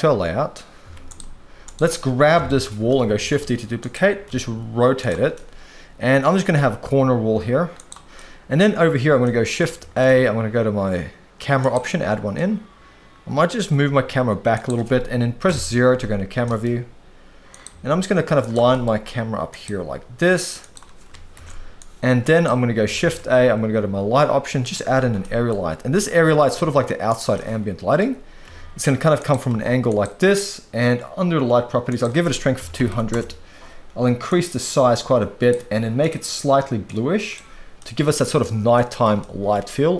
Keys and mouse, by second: 0.0 click, 0.0 z, 0.8 z, 1.6 click, 2.3 KP_7, 3.1 shift+d, 3.8 click, 4.2 r, 5.3-6.4 middle drag, 6.9 g, 8.1-8.5 middle drag, 9.2 middle click, 9.8 shift+a, 12.3-13.6 middle drag, 13.8 g, 14.5 click, 15.5 KP_0, 16.3 g, 16.4 middle click, 17.7 g, 18.4 click, 18.5 g, 18.7 middle click, 19.7 g, 21.3 ctrl+b, 21.7 click, 23.0 shift+a, 25.2-25.5 middle drag, 26.0-26.4 middle drag, 26.5 g, 27.3-27.9 middle drag, 28.4 r, 29.5 g, 29.9 click, 31.9-33.1 drag, 32.8 0, 34.2-35.5 drag, 36.0 click, 38.7-39.0 middle drag, 39.2-39.5 shift+middle drag.